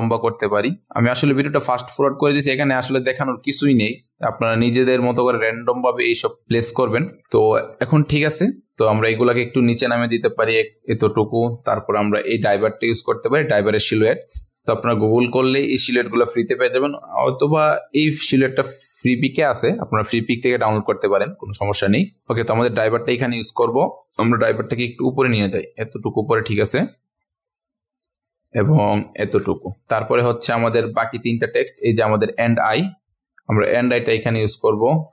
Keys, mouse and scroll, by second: 0.9-1.8 ctrl+scroll up 1, 1.8 click, 4.3 shift+click, 5.6 click, 6.8 Escape, 7.2-9.7 ctrl+alt+scroll down 1, 9.7 click, 10.7 click, 11.3 ctrl+alt+scroll down 1, 12.6 click, 13.5-15.1 ctrl+alt+scroll up 1, 15.1-20.7 drag, 23.2 Up, 23.5 Up, 23.7 Up, 24.8 click, 26.8-28.8 drag, 29.0 click, 29.6-30.8 ctrl+scroll down 2, 30.8 click, 31.9 ctrl+alt+scroll up 1, 33.8-35.1 drag.